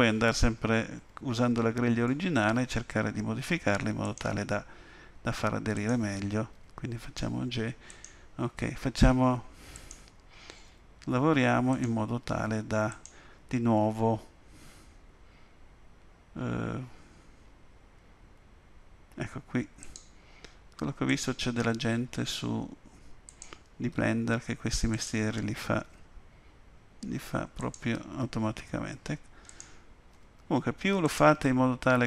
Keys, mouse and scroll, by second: 0.9 g, 5.7 click, 6.5 g, 9.7 click, 10.7 g, 12.9 click, 13.8 g, 21.1 click, 21.7 g, 24.9 click, 25.8 g, 28.1-28.9 scroll down 2, 29.5 click, 30.1 g.